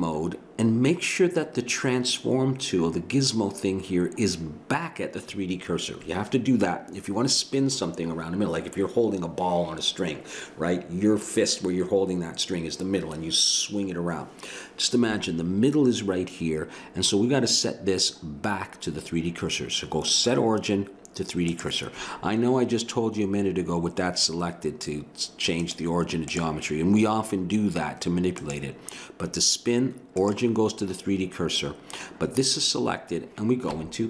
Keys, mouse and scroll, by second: 20.1-27.3 drag, 28.4-30.1 drag, 33.7 Tab.